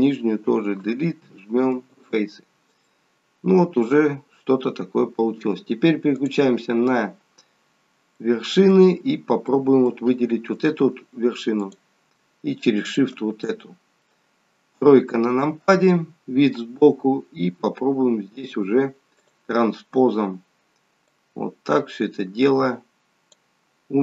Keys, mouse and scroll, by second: 0.8 Delete, 2.9 middle click, 6.1 click, 7.6-8.4 scroll down 1, 8.4 middle click, 8.4 scroll down 1, 11.5 click, 12.8 shift+click, 13.4 middle click, 14.7 KP_3, 16.0 scroll up 2, 19.1 click, 21.1 click.